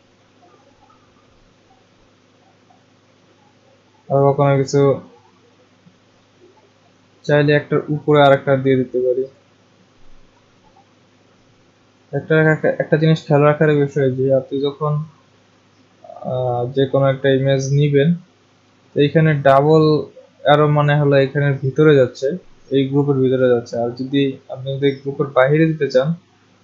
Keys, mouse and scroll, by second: 0.7 click, 2.8 click, 3.5 click, 4.9 click, 9.3 click, 11.9 click.